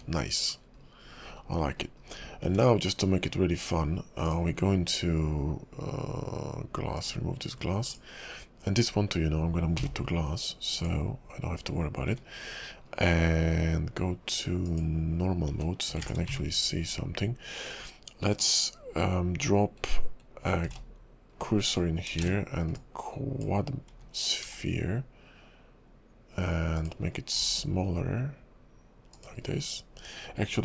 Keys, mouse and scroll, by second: 0.6-1.4 scroll down 7, 1.4-2.0 scroll up 8, 2.0 KP_5, 4.3 click, 7.0 click, 7.9 click, 9.8 m, 11.6-12.7 scroll up 3, 13.0-13.8 scroll down 3, 14.7 click, 15.3 scroll down 2, 17.6-18.0 scroll down 2, 17.6 `, 18.4 click, 20.6 shift+s, 21.3 scroll up 3, 22.2 shift+a, 24.4 s, 27.0 scroll up 4, 27.3 s, 29.6 scroll down 3.